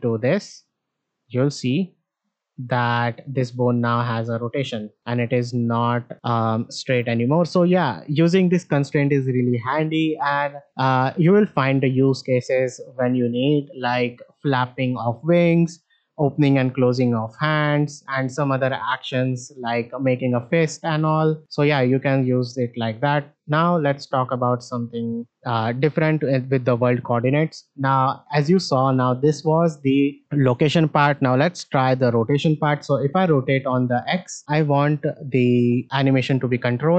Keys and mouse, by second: 4.6 space, 5.2 space, 7.2 alt+r, 11.0 click, 12.2-14.2 drag, 18.5-21.4 drag, 25.3 alt+r, 26.0 shift+middle drag, 26.9 middle click, 27.8 click, 31.0-34.1 drag, 34.4 shift+middle click.